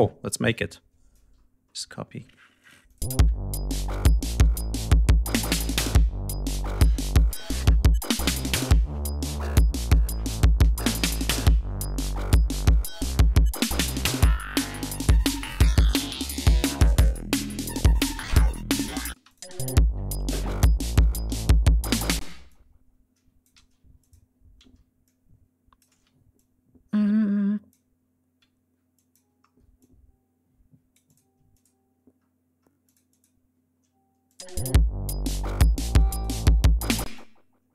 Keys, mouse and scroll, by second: 0.3 ctrl+click, 1.6 ctrl+middle click, 2.5-3.1 ctrl+drag, 2.9 ctrl+space, 4.6-5.9 ctrl+scroll down 7, 6.4 ctrl+scroll down 2, 7.7 scroll down 2, 19.1 space, 19.2 click, 21.2 d, 21.8 ctrl+scroll up 2, 22.1 ctrl+space, 22.4 ctrl+click, 23.5 ctrl+y, 23.9 ctrl+click, 24.5 ctrl+y, 25.0 ctrl+click, 25.8 ctrl+y, 29.4 ctrl+scroll up 2, 29.7-31.3 ctrl+drag, 31.5 click, 32.1-32.7 scroll up 2, 32.7 click, 34.1 click, 34.3 space, 35.7 click, 36.9 space, 37.0 click.